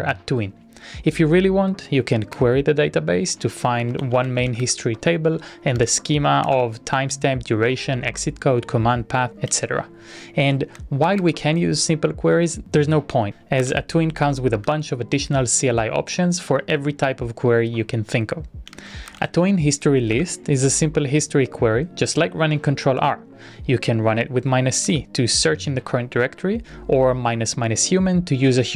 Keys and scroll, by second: 2.6 Return, 3.6-5.3 typing, 5.6 Up, 5.8 Up, 6.6 Return, 7.3-11.0 typing, 10.4 Return, 11.4 Return, 13.4-14.4 typing, 14.8 Return, 18.9-19.9 typing, 20.3 Return, 23.5 Up, 23.5 Tab, 25.0 Return.